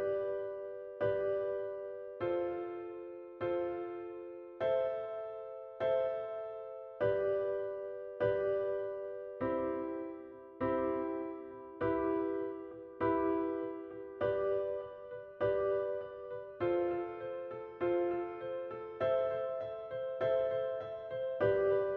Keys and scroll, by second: 0.1 shift+a, 1.8 shift+e, 3.2 shift+e, 4.1 shift+e, 5.6 shift+f, 5.7 shift+a, 7.1 shift+f, 8.6 shift+a, 9.1 shift+w, 12.2 shift+a, 13.0 shift+w, 14.4 shift+a, 18.1 shift+a, 18.6 shift+z, 19.5 alt+shift+a, 20.0 ctrl+shift+n, 20.1 ctrl+shift+Return, 20.5 shift+w, 21.9 shift+7.